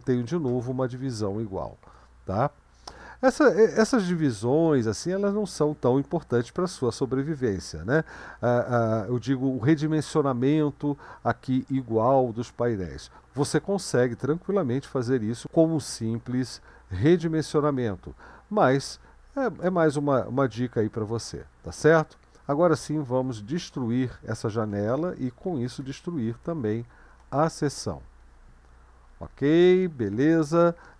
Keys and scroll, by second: 24.7 ctrl+b, 25.8 typing, 27.2 typing.